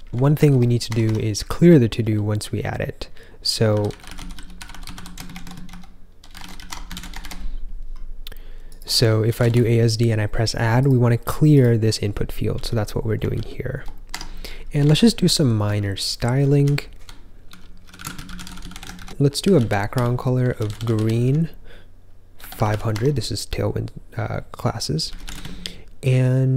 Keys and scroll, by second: 0.5 ctrl+k, 0.8 Escape, 1.0 Escape, 1.3 j, 1.6 j, 1.6 j, 2.4 j, 3.4-7.1 typing, 7.1 ctrl+j, 7.4 ctrl+j, 9.0-9.8 typing, 14.0 Escape, 14.4 typing, 14.9 ctrl+b, 15.7-16.9 typing, 19.1-23.1 typing, 24.8-25.5 typing.